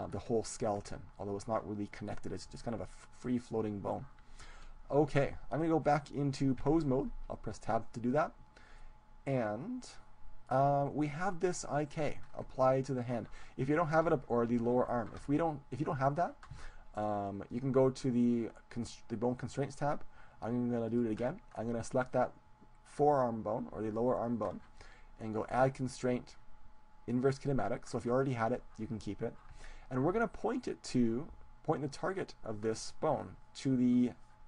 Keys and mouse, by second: 0.4-6.5 middle drag, 6.5 Tab, 8.7-10.7 middle drag, 11.3-13.5 right drag, 12.2-14.9 middle drag, 17.7-19.9 drag, 20.9-22.6 drag, 23.0-24.5 right drag, 25.5-26.9 drag, 27.1 click.